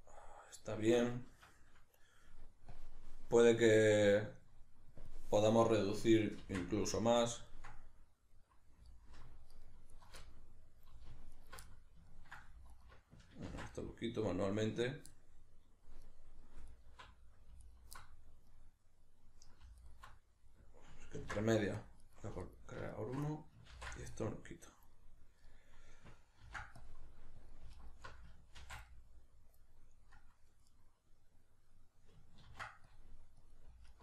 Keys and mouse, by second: 1.3 Escape, 6.4 ctrl+x, 6.7-8.9 middle drag, 8.9 alt+right click, 9.5 alt+shift+right click, 9.9 alt+shift+right click, 10.2-11.3 middle drag, 11.3 alt+shift+right click, 11.7-17.7 middle drag, 12.7 alt+right click, 13.5 ctrl+x, 16.7 alt+right click, 17.7 alt+right click, 18.0-19.8 middle drag, 19.8 alt+right click, 20.1-21.2 middle drag, 21.2 ctrl+r, 22.4 alt+right click, 22.9 alt+shift+right click, 23.3 middle click, 23.7 ctrl+x, 24.1-25.4 middle drag, 26.4 ctrl+r, 26.4-27.7 middle drag, 27.5 click, 27.7 alt+right click, 28.6 ctrl+x, 28.8-34.0 middle drag, 32.5 ctrl+r, 33.5 click, 33.9 alt+right click.